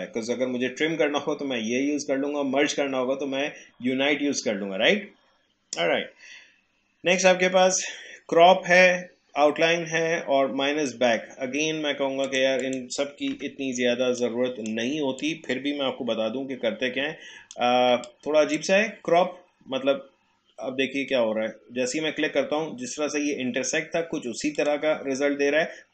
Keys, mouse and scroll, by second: 12.2 click, 13.3 Delete, 14.2 click, 15.2-18.0 alt+drag, 18.0-21.0 drag, 24.6 click.